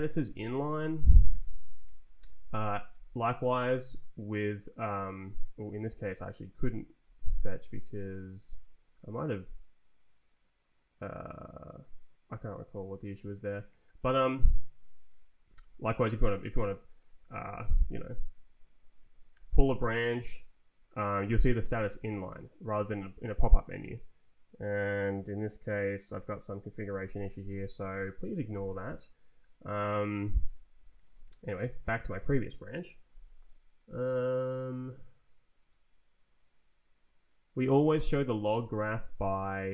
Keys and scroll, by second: 0.2 Down, 1.0 Up, 1.3 f, 1.6 Down, 2.1 Down, 2.6 Down, 2.9 f, 5.9 Escape, 6.5 Up, 7.0 Down, 8.3 f, 12.3 Up, 15.5 Down, 16.6 Up, 17.2 Down, 18.2 space, 19.3 p, 26.7 Escape, 27.3 Up, 29.3 Down, 29.8 Down, 30.5 Up, 31.0 space, 38.5 ctrl+t, 39.2 Right.